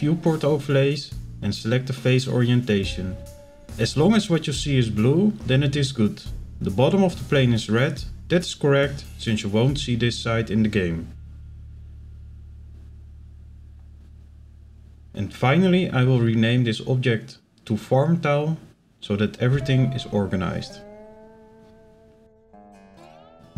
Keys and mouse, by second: 1.1 shift+middle click, 3.1 click, 3.6 click, 4.3 shift+middle click, 4.8-8.0 middle drag, 8.6 shift+middle click, 9.0 middle click, 9.9 shift+middle click, 14.0-17.2 middle drag, 17.7 click, 17.8-22.0 drag.